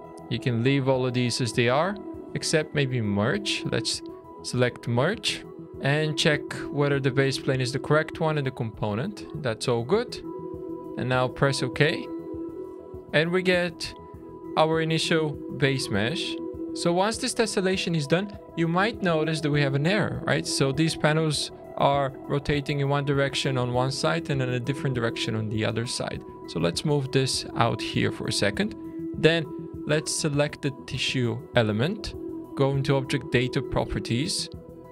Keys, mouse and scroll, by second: 12.2 middle click, 13.0-13.9 scroll down 1, 13.9 shift+middle click, 13.9 scroll down 1, 16.5 ctrl+z, 16.5 click, 16.5 middle click, 25.3 click, 26.9 middle click, 27.6 shift+middle click, 34.7-34.9 scroll up 4.